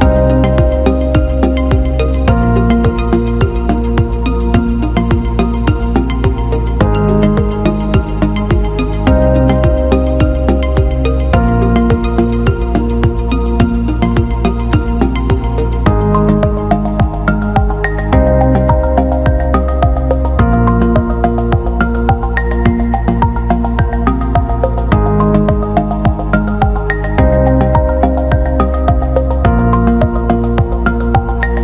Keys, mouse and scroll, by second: 0.1-3.5 drag, 4.3-5.4 drag, 6.0 alt+middle click, 6.9 alt+middle click, 7.5 click, 7.8-9.0 drag, 9.7-10.0 drag, 10.6 alt+middle drag, 10.7 alt+middle drag, 13.3 click, 15.0 Tab, 15.6 click, 17.1 l, 22.5 Tab, 24.3-25.6 drag, 27.5-28.1 alt+middle drag, 28.3-30.5 right drag, 31.0-31.4 alt+middle drag.